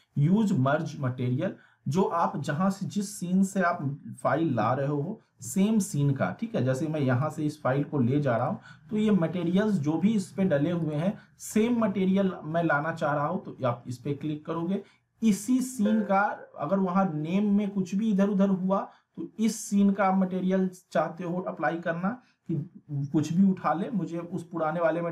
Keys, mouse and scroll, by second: 7.2 click, 8.7 click, 11.0 click, 15.6-16.2 middle drag.